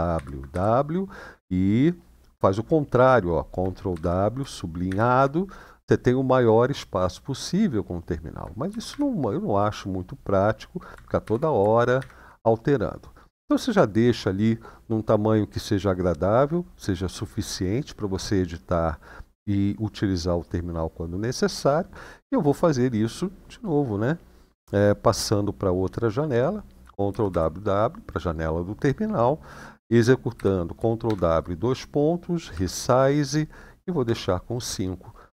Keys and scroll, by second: 3.7 ctrl+w, 4.6 =, 8.4 ctrl+w, 8.6 ctrl+w, 11.0 ctrl+w, 11.7 shift+-, 26.9 ctrl+w, 27.0 ctrl+w, 30.1 ctrl+w, 30.8 shift+;, 32.3 Up, 33.8 Return.